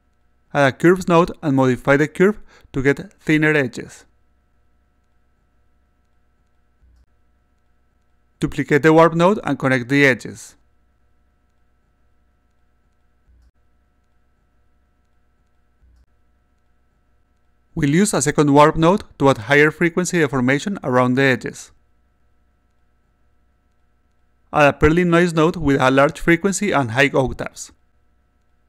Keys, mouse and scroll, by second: 0.4-2.1 drag, 2.8 click, 4.6-7.8 drag, 9.0 click, 10.8-12.2 shift+drag, 13.1 click, 14.5 click, 15.7 click, 17.7 click, 19.0-20.3 drag, 20.9 click, 21.4 click, 23.7 click, 25.2-26.7 drag, 27.6 click, 28.3-28.6 typing.